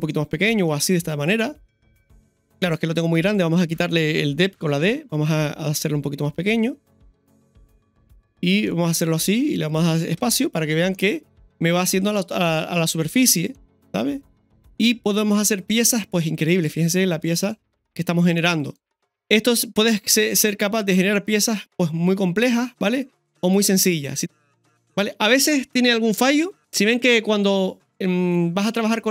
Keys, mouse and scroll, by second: 0.1-21.1 middle drag, 2.7 scroll down 1, 16.4 scroll down 1, 17.8-18.3 scroll up 2, 18.4 scroll down 1, 21.2 middle click, 22.4 middle click, 23.1 right click, 23.7-29.1 middle drag, 24.2 scroll down 2, 28.2 scroll up 2.